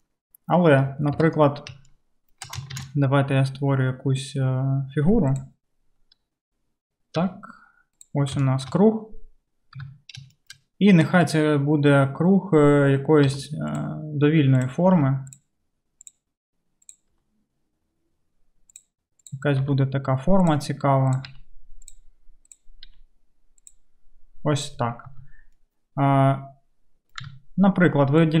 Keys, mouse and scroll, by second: 1.2 KP_7, 2.8 shift+a, 7.2 g, 8.2-11.1 shift+middle drag, 9.8 Tab, 11.2-12.9 drag, 13.4 g, 15.1 g, 16.1 click, 16.9 click, 17.2 g, 19.7 g, 21.8 g, 23.0-28.4 middle drag, 23.0 g, 25.1 Tab, 27.3 Tab.